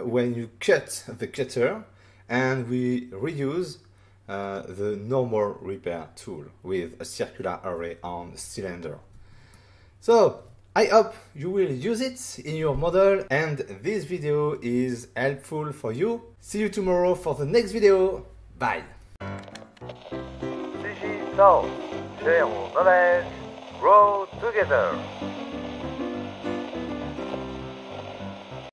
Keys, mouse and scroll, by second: 9.5 middle click.